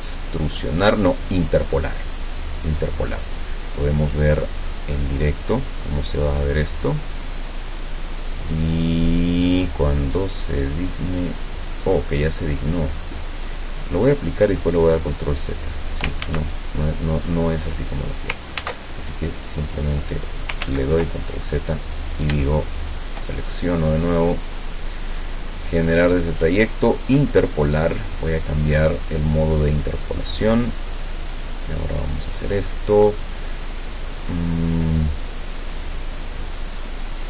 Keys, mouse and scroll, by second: 1.5 click, 2.7-3.6 drag, 5.2 click, 11.8-12.6 drag, 14.0 click, 16.2 ctrl+z, 18.6 ctrl+z, 20.0 click, 20.6 ctrl+z, 21.9 click, 22.8 shift+click, 24.8 click, 27.0 click, 28.2 click, 31.0 click.